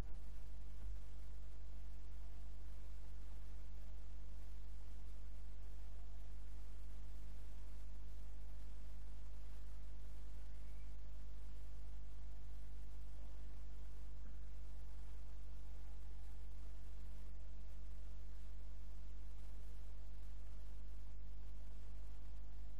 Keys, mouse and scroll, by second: 0.9 Tab, 3.1-6.7 drag, 8.0 click, 10.9 click, 13.2 click, 15.3 click, 17.0 click, 19.4 click, 22.5-22.7 middle drag.